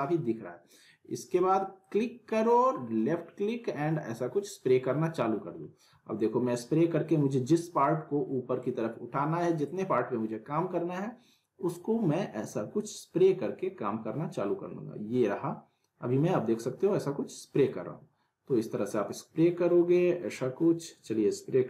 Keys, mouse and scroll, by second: 1.8-21.6 drag.